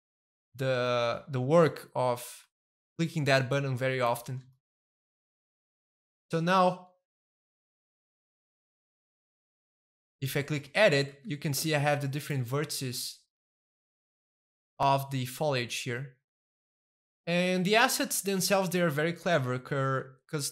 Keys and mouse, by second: 0.0 middle click, 0.7-3.4 shift+middle drag, 3.4 click, 4.1 middle click, 4.4-5.6 shift+middle drag, 5.6 shift+middle click, 6.1 Tab, 6.4 middle click, 6.8 a, 7.2-8.2 middle drag, 8.2 a, 8.7 middle click, 8.9 Tab, 10.0 middle click, 10.6 shift+middle click, 11.0 a, 11.4 middle click, 11.6 a, 12.0-14.3 middle drag, 14.4-15.5 shift+middle drag, 15.0 a, 15.6 shift+middle click, 16.3 a, 16.5 middle click, 17.2-20.5 shift+middle drag.